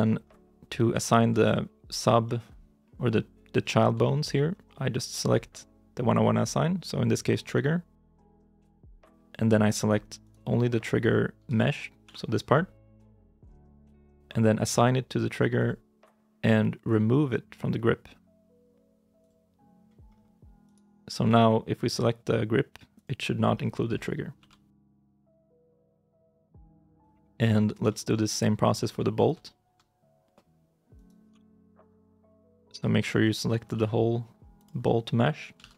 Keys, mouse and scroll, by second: 0.5 scroll up 1, 0.9 shift+middle click, 2.1 middle click, 3.9 shift+middle click, 4.3-6.3 scroll up 1, 8.4 scroll up 1, 10.1 right click, 11.3 l, 11.9 g, 12.8 ctrl+z, 19.9 scroll down 1, 20.5 right click, 23.4-24.2 scroll down 1, 24.2 g, 25.3 ctrl+z, 25.9 right click, 26.7 shift+middle click, 27.7 shift+middle click, 28.5 scroll up 1, 29.3 shift+i, 29.4 shift+middle click, 30.8 right click, 31.2 l, 31.6 scroll down 1, 32.1 middle click, 33.6 g, 34.7 middle click, 35.5 ctrl+z.